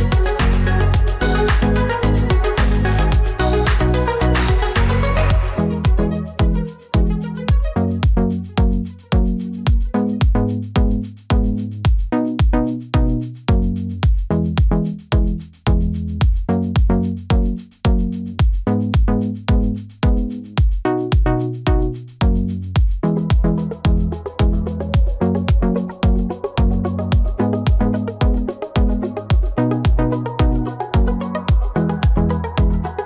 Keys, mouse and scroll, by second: 2.4 ctrl+j, 19.6 shift+click, 21.6 right click.